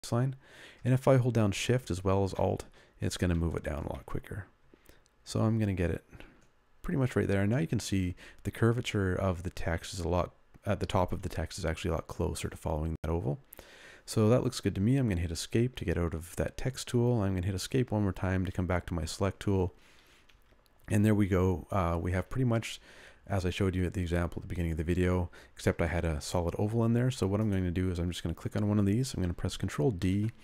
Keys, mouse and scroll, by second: 0.0 alt+Down, 0.3 alt+Down, 0.6 alt+Down, 0.9 alt+Down, 1.2 alt+Down, 2.3 alt+shift+Down, 2.7 alt+shift+Down, 3.0 alt+shift+Down, 3.3 alt+shift+Down, 3.6 alt+shift+Down, 3.9 alt+shift+Down, 4.5 alt+shift+Down, 5.2 alt+shift+Down, 15.1 Escape, 17.6 Escape, 29.9 ctrl+d.